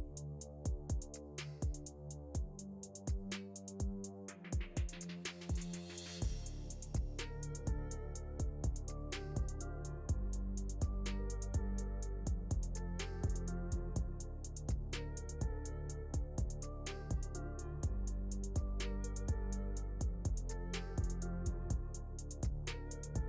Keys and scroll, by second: 12.9 Delete, 16.2 F3, 20.8 F3.